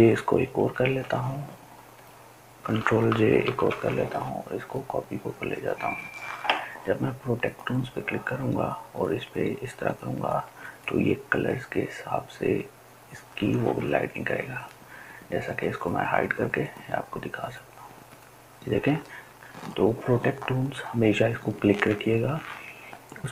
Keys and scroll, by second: 0.3 ctrl+j, 3.0 ctrl+j.